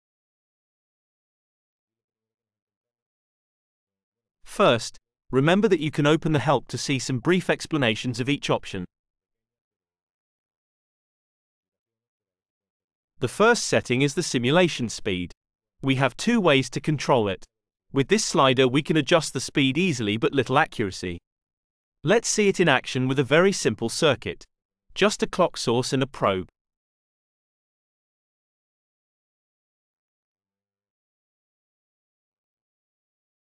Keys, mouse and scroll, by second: 6.0 click, 8.1-8.8 scroll down 1, 8.8-9.7 scroll up 1, 12.8 click, 22.0 click, 23.1-24.4 scroll up 2, 24.8-26.5 drag, 27.5 click, 28.8 click, 29.8 click, 31.8 click, 33.0 click.